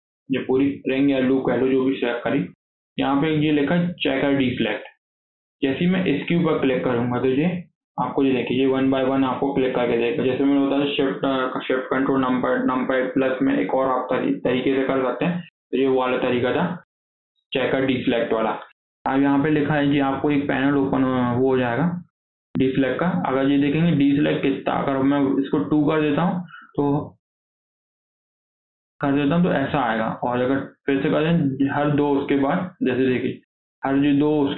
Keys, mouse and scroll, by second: 2.4-5.5 drag, 7.5-8.2 scroll up 2, 8.2 scroll down 4, 8.4 shift+middle click, 8.9 scroll up 2, 9.2-12.3 shift+middle drag, 16.5-19.6 drag, 25.7-28.6 drag, 30.0-32.0 drag, 32.0 scroll down 4, 32.2 middle click, 32.8-33.1 scroll up 1, 33.1-34.5 middle drag.